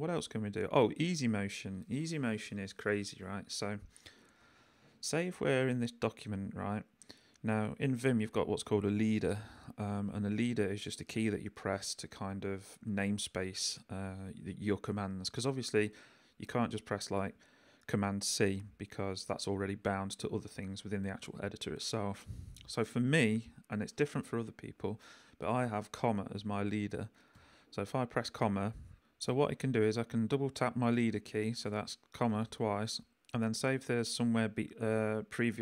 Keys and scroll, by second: 3.7 k, 7.7 j, 27.3 ,, 28.9 Escape, 32.1 ,.